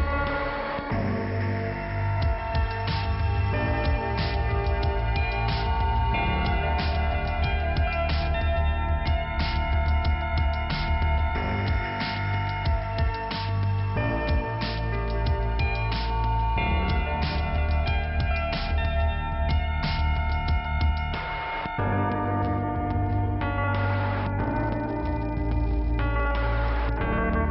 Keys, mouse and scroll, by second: 2.1 click, 8.2-8.9 scroll up 1, 8.9 click, 10.5 scroll down 1, 13.5 scroll up 1, 16.7 click, 20.1 click, 22.5 middle click, 24.5 click, 25.4 middle click, 26.8 click.